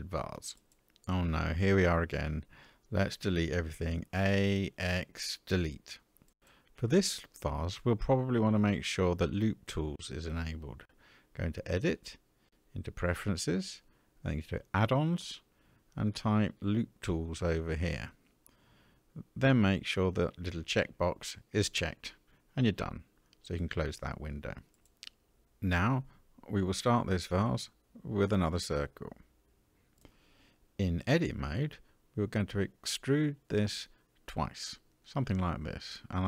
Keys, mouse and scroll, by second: 3.0 a, 3.8 x, 11.0-12.9 drag, 24.2 x, 26.7-29.0 drag, 30.5 Tab, 31.9 e, 34.8 e.